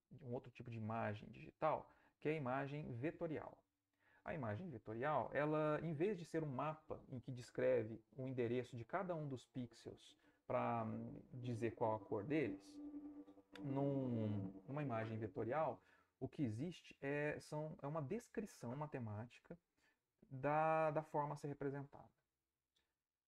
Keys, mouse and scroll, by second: 2.3-4.1 middle drag.